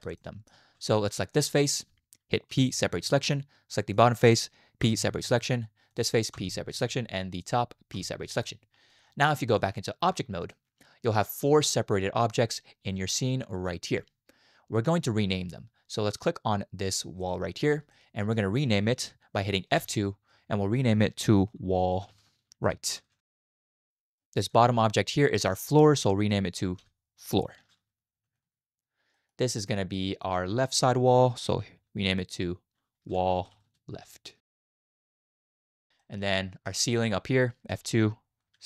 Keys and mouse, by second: 0.2 shift+click, 1.3 click, 2.5 p, 3.9 click, 4.8 p, 6.3 p, 8.0 p, 9.8-10.5 drag, 17.9-18.3 shift+drag, 19.8 F2, 22.1 l, 26.8 F2, 28.1 o, 29.2 middle click, 29.9 middle click, 30.8 F2, 33.5 l, 34.5 BackSpace, 36.0 middle click, 37.7 F2.